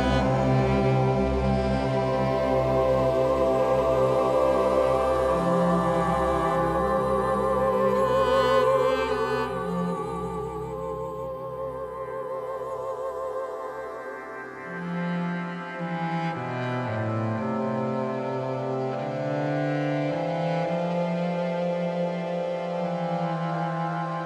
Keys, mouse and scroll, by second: 3.4 middle click, 3.5-6.6 drag, 7.3-14.0 drag, 16.9-24.2 drag, 20.7 a.